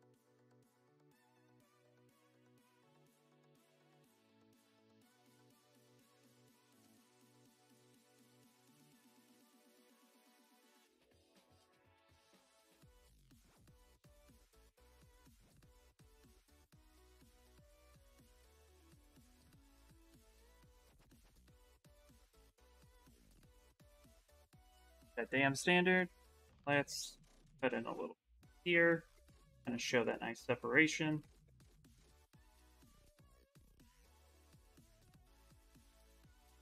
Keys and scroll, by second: 24.2-26.1 typing, 33.5-36.0 typing.